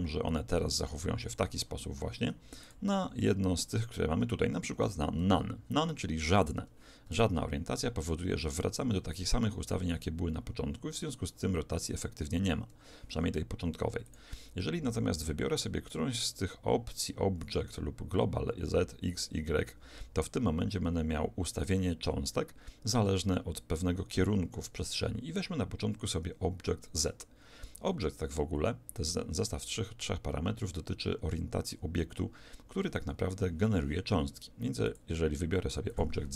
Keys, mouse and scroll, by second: 1.9 Escape, 2.7-4.3 drag, 7.1 alt+a, 12.7 Escape, 14.1-16.3 drag, 34.9 click.